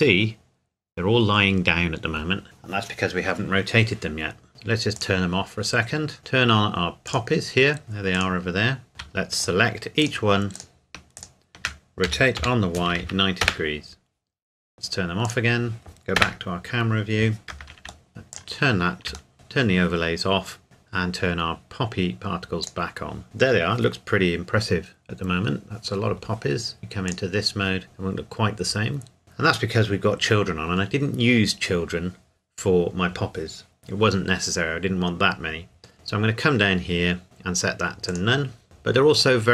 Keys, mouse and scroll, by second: 0.0-0.4 scroll up 1, 4.5-5.0 scroll up 1, 5.0 click, 5.6 scroll down 1, 7.1 click, 8.2 click, 8.9 middle click, 9.4 shift+click, 12.1 r, 12.4 y, 12.9 KP_9, 13.0 KP_0, 13.4 KP_Enter, 15.3 click, 16.2 KP_0, 18.1 scroll down 2, 18.3 click, 20.6 scroll down 1, 20.9-22.6 scroll up 1, 22.6 click, 27.1 click, 35.9-38.1 scroll down 2, 38.1 click, 38.6 middle click, 39.4-39.5 scroll down 2.